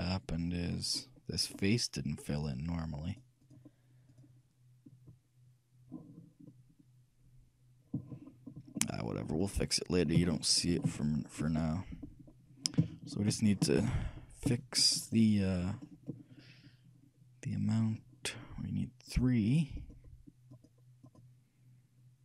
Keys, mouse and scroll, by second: 1.8-6.0 shift+right drag, 8.4-14.6 middle drag, 15.2-15.6 scroll down 1, 15.6-19.2 scroll up 1, 19.2-22.2 drag.